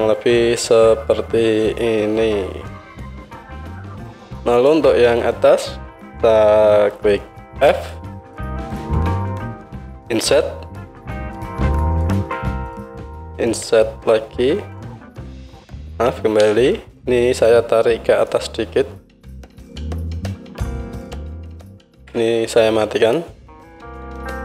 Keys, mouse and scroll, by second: 3.3-4.7 drag, 4.7-18.3 alt+middle drag, 7.5 f, 10.3 i, 13.4 i, 16.4 ctrl+z, 18.3-23.3 drag, 21.9 ctrl+z, 23.3-24.3 middle drag, 24.3-24.4 drag.